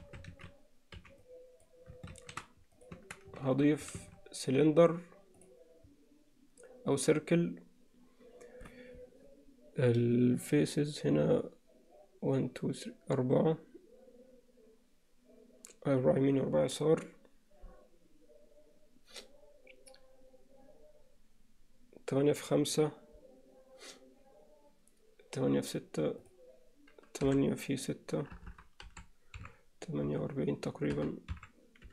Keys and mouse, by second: 0.0 a, 1.0 b, 2.2 shift+s, 3.0 Tab, 4.0 shift+a, 26.2-31.9 drag, 28.5 BackSpace.